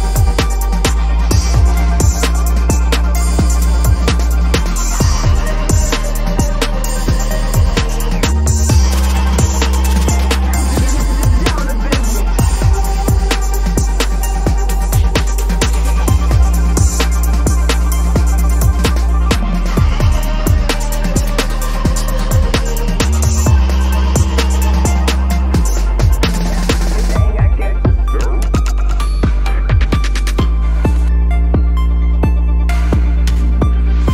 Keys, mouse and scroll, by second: 4.3 ctrl+-, 4.6 ctrl+-, 4.7 ctrl+-, 4.9 ctrl+-, 5.2 ctrl+-, 5.5 ctrl+-, 6.9 ctrl+-, 7.5 ctrl+=, 7.7 ctrl+=, 8.6 ctrl+=, 9.0 ctrl+=, 9.2 ctrl+=, 9.4 ctrl+=, 10.0 space, 11.0 p, 11.5 ctrl+=, 12.1 ctrl+-, 12.2 space, 13.3 ctrl+z, 15.0 double click, 15.1 space, 15.5 ctrl+=, 15.6 ctrl+=, 15.6 space, 16.8 space, 17.5 right click, 18.3 Return, 18.8 ctrl+-, 19.0 ctrl+-, 19.2 ctrl+-, 19.3 ctrl+-, 19.6 ctrl+-, 21.9 alt+click, 24.6 double click, 29.3 space, 29.9 ctrl+=, 30.1 ctrl+=, 30.4 ctrl+=, 31.0 p, 31.5 ctrl+=, 31.8 space, 33.2 ctrl+-, 33.3 space, 33.7 ctrl+-.